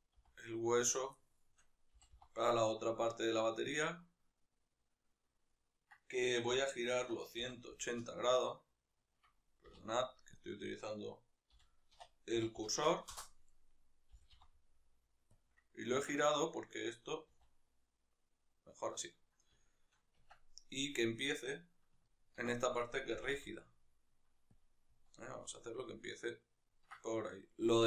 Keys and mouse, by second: 0.7 click, 0.9-3.5 shift+middle drag, 1.6 g, 3.5 click, 4.1-6.2 right drag, 6.2 r, 9.0 Escape, 10.1 ., 11.3 r, 13.2 right click, 13.9 g, 15.2 click, 15.9 Tab, 16.1 right click, 17.1 r, 18.5 right click, 19.3-20.7 shift+middle drag, 20.1 Tab, 20.7 right click, 21.7-24.3 ctrl+middle drag, 22.9 g, 24.3 click, 24.7 z, 25.9-27.8 ctrl+middle drag.